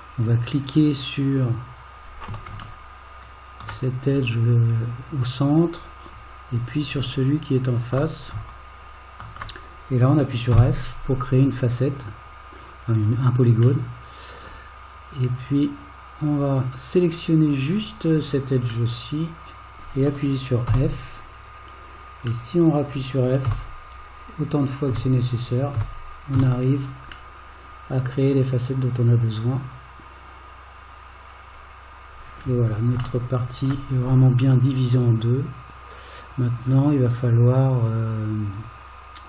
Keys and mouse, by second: 2.8-3.7 shift+middle drag, 10.6 f, 13.8-14.4 middle drag, 16.3 click, 18.9-19.8 middle drag, 20.7 f, 22.5 middle click, 23.5 f, 25.8 f, 27.4-32.4 middle drag, 33.2-33.7 shift+middle drag, 34.6-39.2 middle drag.